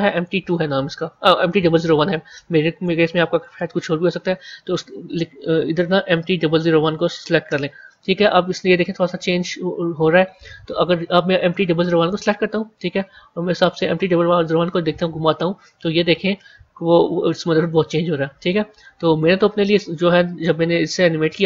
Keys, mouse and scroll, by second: 3.3-6.5 drag, 12.0 click, 13.2 g.